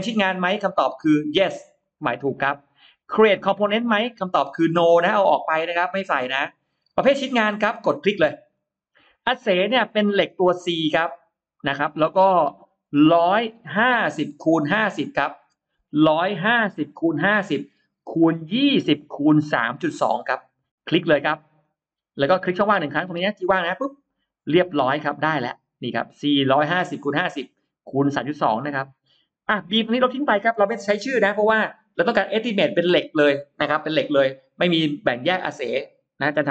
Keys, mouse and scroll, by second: 1.6 click, 2.2 click, 4.5 click, 5.3 click, 8.4 click, 10.6 click, 11.8-12.5 scroll down 2, 12.7 scroll down 2, 13.4-15.6 scroll down 8, 16.6-17.0 scroll down 2, 18.0 scroll down 2, 18.6-18.9 scroll up 2, 21.5 click, 23.6 click, 29.4 click, 31.0 BackSpace.